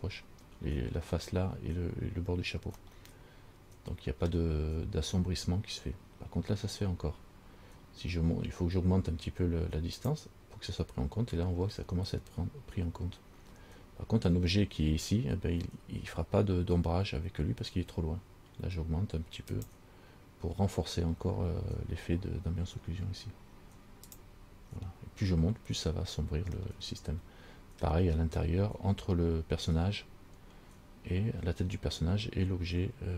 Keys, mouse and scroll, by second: 3.1 middle click, 10.2 click, 19.7 click, 24.2 click, 27.0 middle click.